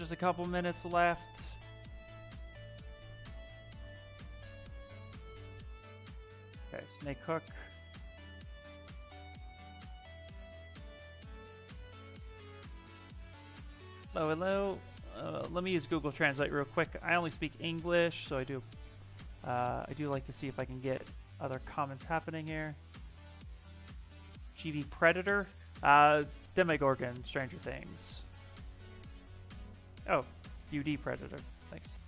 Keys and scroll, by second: 4.1 s, 6.7 b, 7.6 s, 20.7 ctrl+v.